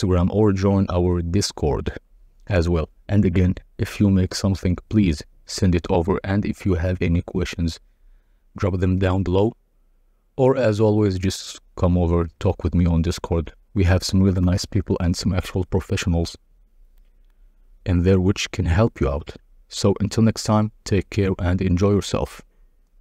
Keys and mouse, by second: 0.1-3.3 drag, 4.5-6.9 drag, 8.4 click, 9.7 drag, 11.8-15.9 drag, 17.2 click, 18.5 click, 19.9-20.8 drag.